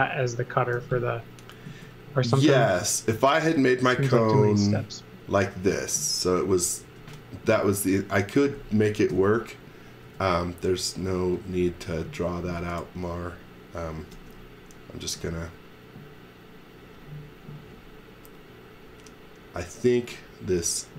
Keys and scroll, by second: 0.7 m, 2.6 s, 6.8 space, 9.1 BackSpace, 10.0 space, 14.1 u.